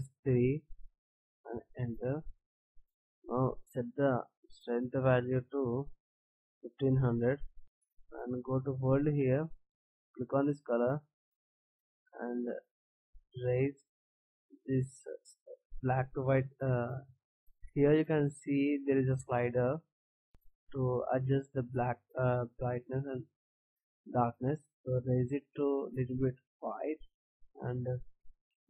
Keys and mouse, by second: 4.3-7.5 drag, 7.5 KP_0, 8.9-11.7 drag.